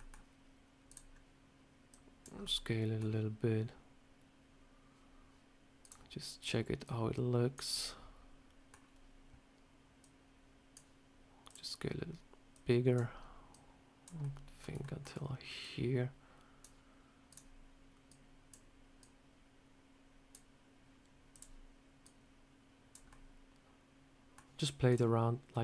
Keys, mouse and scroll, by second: 0.7 click, 1.0 scroll down 1, 1.8 click, 2.2 scroll up 1, 2.3 middle click, 2.9 scroll down 1, 5.7 click, 6.7 click, 7.6 middle click, 9.9 click, 11.3 click, 12.4 click, 13.4 click, 14.1 middle click, 14.7 shift+middle click, 15.5 click, 17.2 click, 18.0 click, 18.9 click, 21.2 click, 21.9 click, 23.0 middle click, 24.8 click.